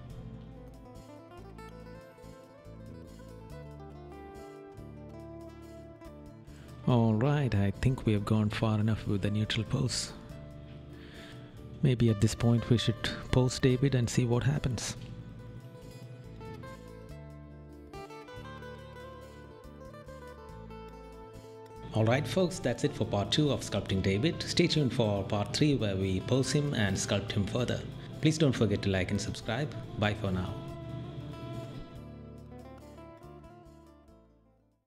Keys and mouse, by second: 0.6 right click, 2.3 right click, 3.3 right click, 5.6 right click, 6.2 right click, 13.4 right click.